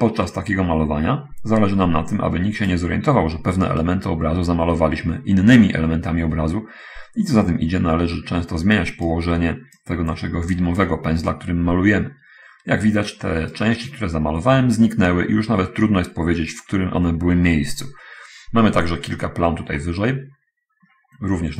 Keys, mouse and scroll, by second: 4.3-9.3 right drag, 10.2-11.3 drag, 11.7-14.1 right drag, 20.1-21.2 middle drag.